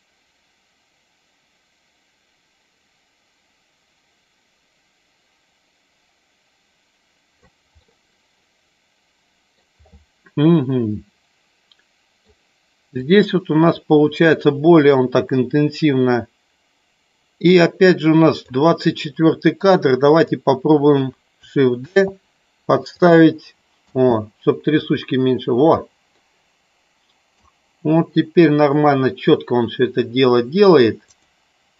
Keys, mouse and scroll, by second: 7.7-9.6 middle drag, 11.7 middle click, 13.0-18.4 drag, 19.6 click, 21.8 shift+d, 22.9 click, 23.8 space, 26.0-27.3 middle drag, 31.1 click.